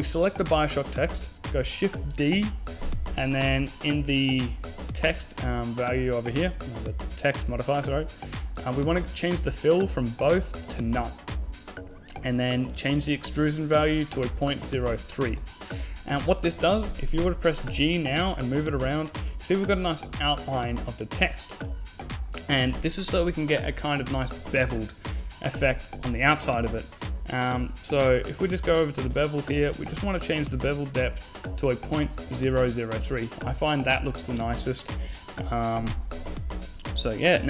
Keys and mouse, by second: 0.8 shift+d, 3.9-6.0 middle drag, 9.1-11.1 drag, 12.0-13.7 drag, 15.9-17.0 middle drag, 16.9 g, 17.6 middle click, 28.7-31.4 drag, 34.6 KP_0.